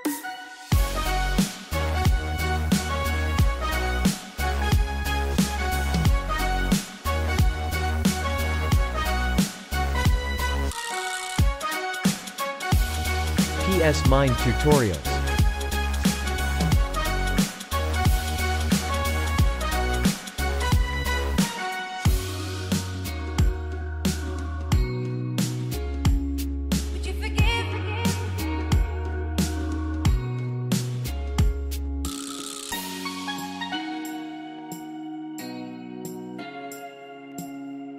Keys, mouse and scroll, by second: 1.9 click, 2.6-4.4 typing, 3.4 click, 5.5 typing, 5.7 click, 7.1 typing, 7.4 click, 10.2 click, 11.3-12.5 typing, 12.4 click, 12.7 click, 13.6-18.0 typing, 14.1 click, 14.9 click, 16.0 click, 16.6 click, 20.5 z, 20.8 click, 26.7 space, 26.8 click, 27.2 space, 27.4 click, 27.8 space, 27.9 click, 28.8 space, 29.1 click, 29.4 space, 29.5 click, 29.7 space, 29.9 click, 33.3 click, 34.7 space, 34.8 click, 36.1 ctrl+shift+click, 37.0 ctrl+g, 37.8 ctrl+alt+shift+e.